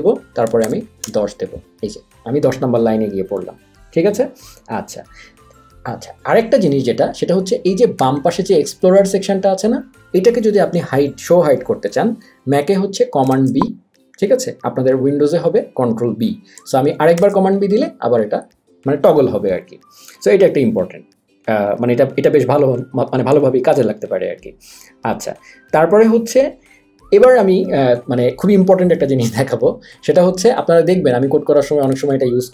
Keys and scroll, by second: 0.3-1.2 typing, 13.3 super+b, 17.3 super+b.